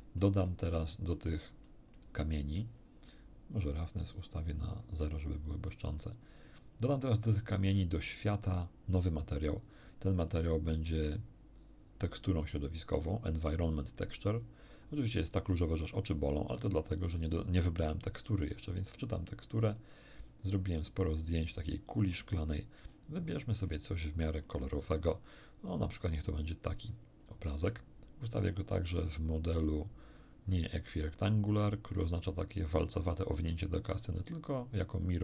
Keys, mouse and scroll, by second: 0.8 middle click, 1.1 middle click, 2.4 middle click, 3.7 click, 5.4 middle click, 6.6 middle click, 9.2 middle click, 10.2 click, 14.0 click, 18.0 click, 19.7 click, 20.7 click, 22.0-23.1 scroll down 3, 24.0 scroll down 1, 26.2 click, 28.6-29.0 scroll down 1, 34.2 click.